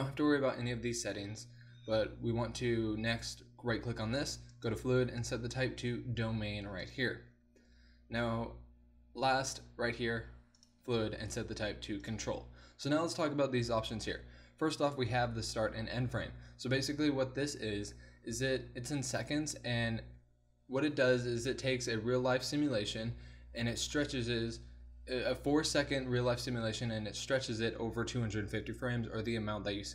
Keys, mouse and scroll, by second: 3.2-4.5 drag, 4.5-6.3 middle drag, 6.3-10.6 drag, 10.6-11.6 middle drag, 11.6-26.9 drag.